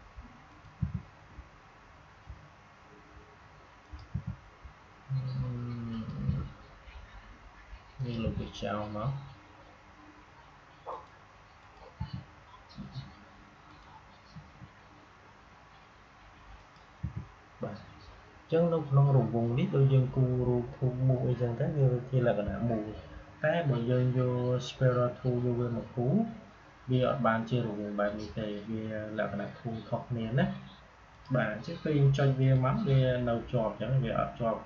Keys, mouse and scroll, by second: 0.4 click, 0.7 Delete, 3.7 click, 4.0 Delete, 5.8 click, 6.2 Delete, 7.8 click, 8.1 Delete, 10.8 click, 11.9 Delete, 13.6 click, 14.2 Delete, 16.9 Delete, 26.9-30.5 drag, 31.0 click.